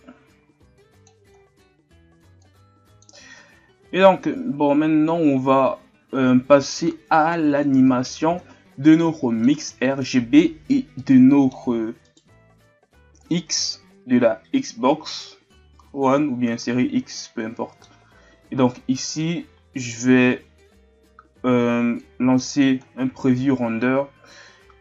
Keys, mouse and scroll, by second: 6.0-6.7 scroll up 2, 6.7-7.1 shift+scroll down 3, 7.1 scroll up 2, 7.9-8.8 ctrl+scroll down 3, 8.8-10.2 middle drag, 10.2-11.0 scroll up 4, 11.0-14.7 middle drag, 20.2 click, 21.0-21.5 scroll down 1, 22.0-22.8 drag, 22.8-24.7 scroll down 3, 24.7 alt+a.